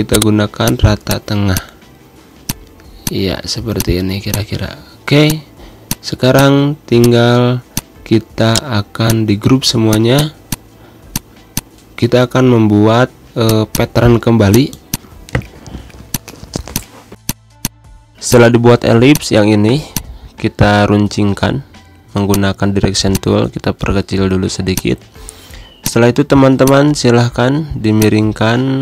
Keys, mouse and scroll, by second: 0.0 click, 2.0 g, 2.3 click, 3.3 z, 3.6 click, 4.5 v, 5.0 click, 8.0 ctrl+a, 8.3 right click, 8.8 click, 10.7 z, 10.9 click, 11.2 space, 11.3 click, 11.5 space, 13.3-15.9 drag, 16.9 z, 17.1 click, 17.4 space, 17.5-24.0 drag, 24.0 Pause, 24.6-28.7 drag, 28.7 shift+right click.